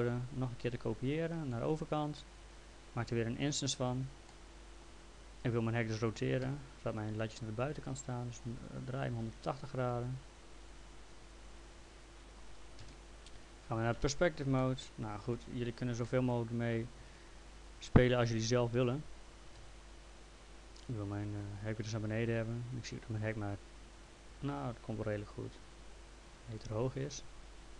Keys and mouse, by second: 3.8 click, 4.3 middle click, 6.4 e, 7.4 click, 12.8 w, 14.0 p, 14.6 alt+middle click, 16.1 alt+middle click, 17.1 ctrl+click, 18.6 l, 19.6 z, 21.4 click.